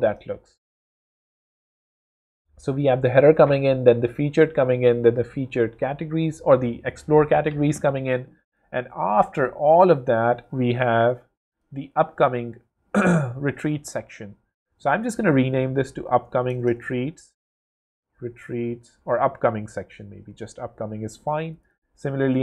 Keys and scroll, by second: 14.6 super+r, 15.1-19.0 typing, 19.6 alt+super+BackSpace, 19.7 super+a, 19.8 super+c, 20.1 super+Return, 20.9 Return.